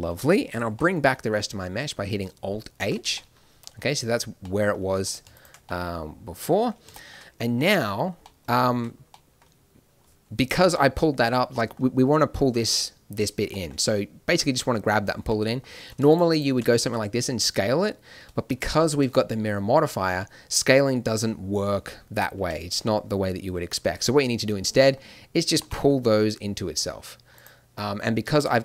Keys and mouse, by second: 0.0 middle click, 2.7 alt+h, 6.6 click, 8.8 z, 16.1-19.9 drag, 16.8 s, 19.9 s, 24.8-27.3 drag, 25.6 g, 28.4 click.